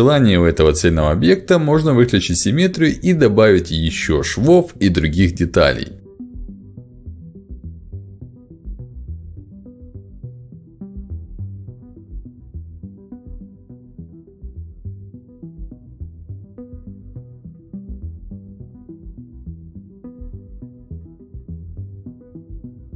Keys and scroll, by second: 7.7 ctrl+alt+x, 12.1 ctrl+z, 15.1 ctrl+alt+x, 21.2 ctrl+alt+x.